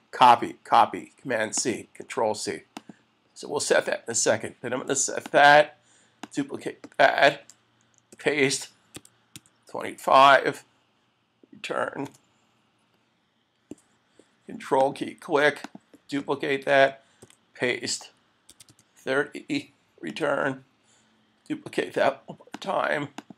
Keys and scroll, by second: 8.1 super+v, 12.1 Return, 17.2 super+v, 20.1 Return.